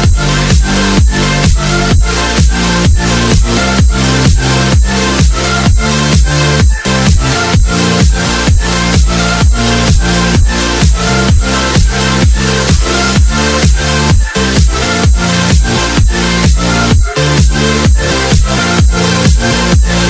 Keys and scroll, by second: 1.4 F3, 5.3 Delete, 6.6 ctrl+z, 12.6 alt+c, 16.1 Escape, 16.4 F4.